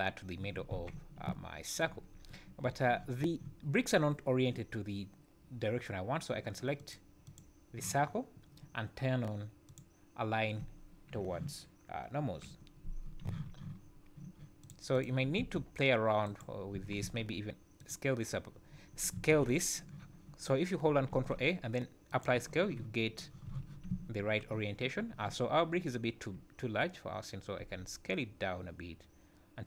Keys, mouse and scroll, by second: 0.7 z, 1.2 `, 2.1 scroll up 2, 2.6 `, 6.8 click, 7.2 click, 9.6 click, 12.2 KP_7, 12.8 scroll down 2, 13.2 z, 13.8 scroll up 2, 14.6 click, 14.9 click, 15.4 r, 17.0 ctrl+a, 19.3 ctrl+a, 21.2 ctrl+a, 23.5 z, 23.9 `, 27.8 s.